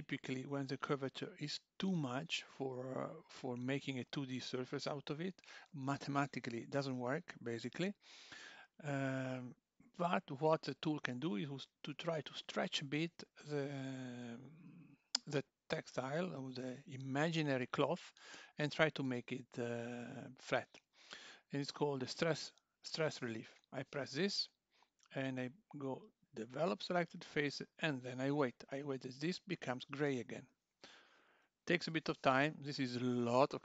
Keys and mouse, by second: 6.9 click, 7.8 Tab, 22.9 click, 26.5 click.